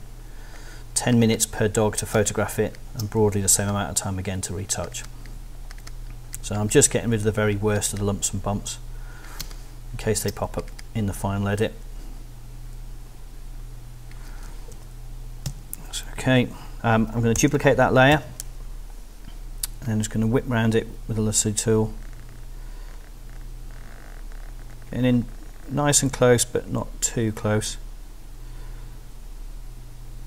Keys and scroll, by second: 2.1 alt+space, 3.2 alt+space, 9.4 space, 10.4 alt+space, 14.7 super+0, 15.5 super+-, 17.3 super+j, 18.1 super+l, 18.6 i.